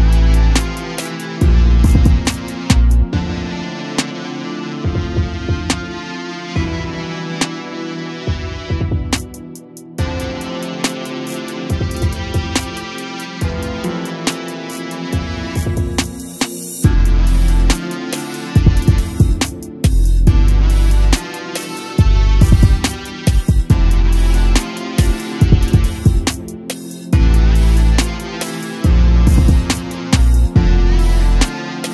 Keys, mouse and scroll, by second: 0.9 a, 1.1-1.6 scroll down 5, 1.6-2.3 middle drag, 2.3-2.8 scroll up 2, 2.8-4.0 shift+middle drag, 4.0 KP_7, 4.6-5.5 scroll up 3, 5.5 click, 6.6 shift+click, 7.1 shift+d, 7.6 g, 9.1 a, 9.2-9.6 scroll down 3, 9.6-10.4 middle drag, 10.4-10.8 scroll up 2, 10.8-11.4 middle drag, 11.4 KP_0, 12.2-12.6 scroll up 1, 12.6-13.1 shift+middle drag, 13.1-13.5 scroll up 1, 13.5 click, 14.1 r, 15.8 a, 16.0 click, 16.4 s, 19.1 a, 19.3 click, 20.4 r, 22.9 a, 23.6 click, 25.0 r, 28.3 click, 29.3 s.